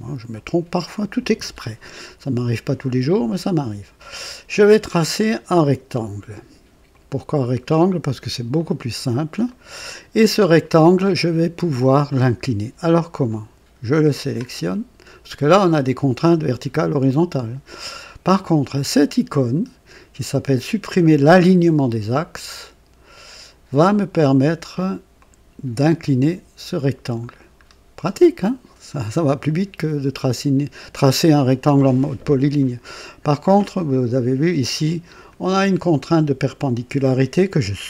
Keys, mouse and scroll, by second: 0.3 right click, 4.9 click, 6.8 click, 8.5 click, 9.4 right click, 13.2-14.5 drag, 22.2 click, 25.1-27.1 drag, 27.6 scroll up 1, 28.3-29.0 right drag, 29.1 scroll up 1, 32.0 scroll up 2, 34.6-35.4 drag, 36.4 click.